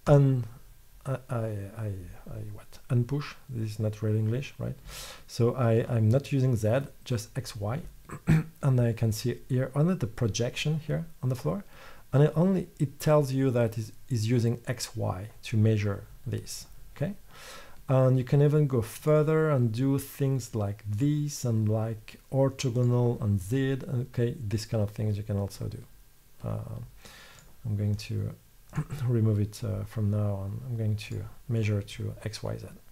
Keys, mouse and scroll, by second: 4.2-5.3 middle drag, 11.2 middle click, 19.1-24.9 middle drag, 27.5-32.9 middle drag.